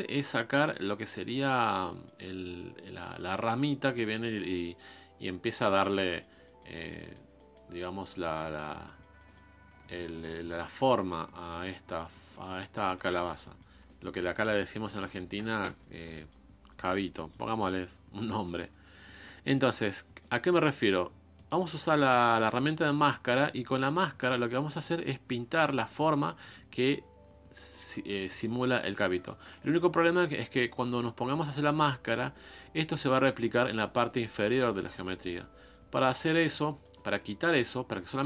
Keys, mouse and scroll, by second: 0.9 scroll down 1, 1.0 middle click, 1.7 scroll down 1, 1.9-6.7 middle drag, 6.7 scroll up 3, 6.9 middle click, 7.7-8.1 scroll up 1, 8.1 middle click, 8.5-8.8 scroll down 1, 8.8 middle click, 9.6 scroll down 2, 9.8-11.4 shift+middle drag, 11.4-11.9 scroll down 2, 11.9 middle click, 12.1 scroll down 1, 12.3 middle click, 12.6-13.1 scroll up 4, 13.1-14.3 shift+middle drag, 14.3-15.1 scroll up 3, 15.1 shift+middle click, 15.6 scroll down 2, 15.8 shift+middle click, 16.0-16.7 scroll up 2, 16.1 middle click, 16.7 middle click, 17.4-18.3 scroll up 1, 18.3-19.2 scroll up 1, 19.2 scroll up 1, 19.3-21.4 shift+middle drag, 21.4-23.0 drag, 23.0 middle click, 23.5-24.5 scroll up 2, 24.5-26.0 scroll up 1, 26.0 scroll down 4, 26.1 scroll up 1, 26.2 middle click, 26.7-27.7 scroll down 1, 27.7-28.2 scroll down 1, 28.2-28.7 scroll down 1, 28.7 scroll down 2, 28.9-38.2 shift+middle drag.